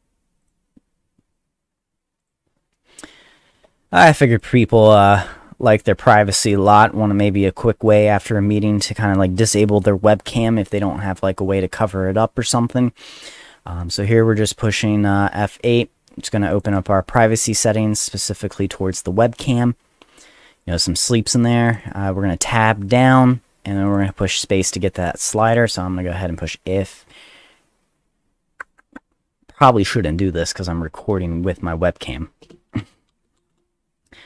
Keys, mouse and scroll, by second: 0.4 click, 1.5 middle click, 2.2 click, 2.5 middle click, 3.0 middle click, 3.6 middle click, 3.9 middle click, 4.3 click, 5.0 click, 16.5 click, 16.6 click, 17.3 click, 17.5 click, 21.7 click, 21.8 click, 23.9 click, 24.0 click, 24.6 click, 25.0 click, 25.5 click, 30.3 click, 32.4 Return, 32.5-33.6 typing.